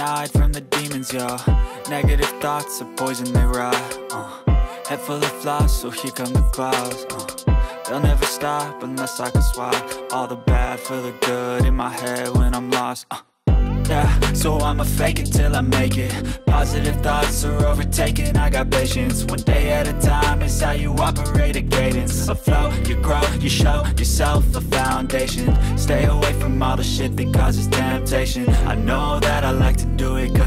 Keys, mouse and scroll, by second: 2.1 click, 2.9 Tab, 3.8 click, 4.7 click, 5.6 click, 6.8 shift+click, 8.6 middle click, 8.6 click, 8.8 middle click, 9.4 middle click, 9.4 click, 12.9 alt+shift+click, 13.5 alt+shift+click, 14.0 alt+shift+click, 14.3 alt+shift+click, 14.7 alt+shift+middle click, 17.3 click, 17.6 Tab, 18.7 click, 19.9 click, 21.0 click, 22.8 middle click, 23.6 click, 25.8 Delete.